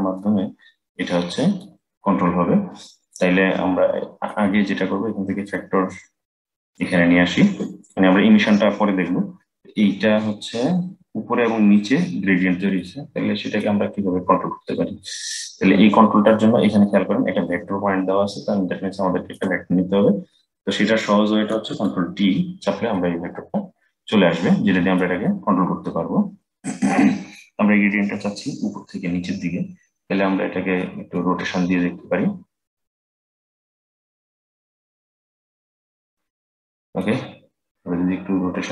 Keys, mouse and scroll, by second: 3.0-5.2 middle drag, 5.2-8.3 drag, 12.5-18.0 middle drag, 19.0 click, 21.3 ctrl+t, 22.7-29.4 middle drag, 30.9-33.8 middle drag, 33.8-35.7 drag, 36.7-38.7 drag.